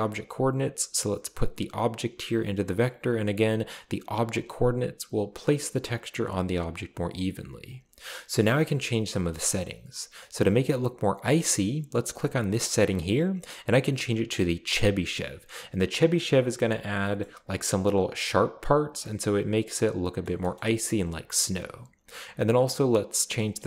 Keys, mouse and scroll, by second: 1.3-4.3 drag, 7.7 scroll up 2, 13.0 click, 14.7 click, 16.0-16.5 scroll down 4, 17.0 shift+scroll down 1, 17.2-18.2 shift+middle drag, 19.3-19.8 middle drag, 20.3 shift+middle click, 20.5 shift+scroll up 2, 20.6 shift+middle click, 21.6-22.5 scroll up 3, 23.4 click.